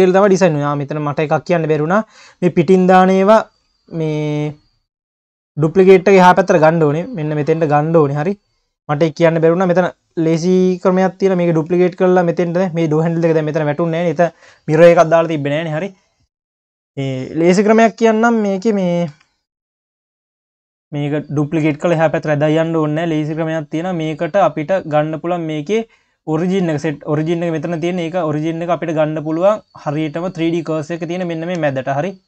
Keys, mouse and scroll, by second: 0.5-1.6 scroll up 3, 1.6 q, 2.9-3.7 scroll down 1, 3.7 q, 4.3-5.0 scroll up 2, 5.0 shift+click, 5.8 scroll down 1, 6.1 q, 7.0-7.6 scroll down 2, 8.5 scroll down 1, 8.8 q, 9.5 click, 11.7 q, 12.1 scroll up 3, 13.0 q, 14.7-15.3 scroll down 2, 17.8 KP_7, 19.1 shift+c, 19.4-19.7 scroll up 2, 19.7 q, 20.3-21.1 scroll up 1, 21.1 click, 21.7 q, 22.3-22.9 scroll up 2, 25.6-26.9 drag, 26.9-27.6 scroll down 1, 27.6-28.4 scroll down 1, 28.4-30.7 drag, 30.7 scroll down 2, 30.9 q, 31.6 q.